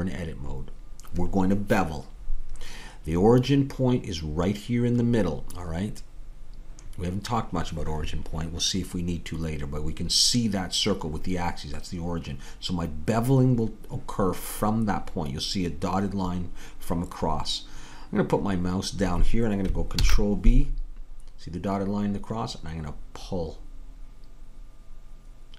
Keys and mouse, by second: 20.0 ctrl+b.